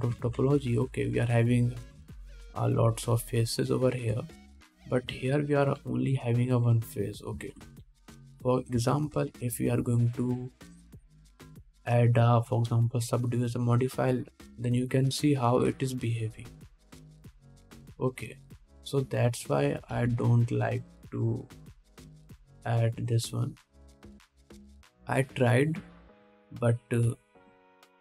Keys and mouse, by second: 0.1-2.7 middle drag, 1.4 alt+a, 2.2 3, 2.7 click, 3.0 middle click, 3.0 shift+click, 3.3 shift+middle click, 3.4 shift+click, 3.7 shift+middle click, 3.8-4.9 shift+drag, 4.9 shift+middle click, 4.9 shift+click, 5.2 shift+middle click, 5.3-7.2 drag, 6.4 alt+a, 7.2 3, 7.5 middle click, 8.7 ctrl+Tab, 13.2-15.1 middle drag, 20.1-23.6 drag, 21.2 ctrl+Tab, 22.5 middle click, 22.5 right click, 23.1 super+middle click, 23.1 super+right click, 24.4-28.0 middle drag.